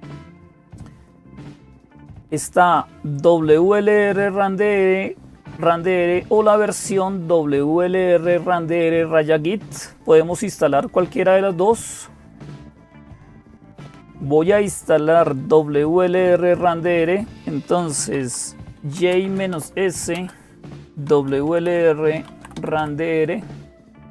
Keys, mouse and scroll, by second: 0.0-24.1 typing, 2.9-5.5 drag, 6.7-9.5 drag, 12.9 click, 14.7-17.8 drag.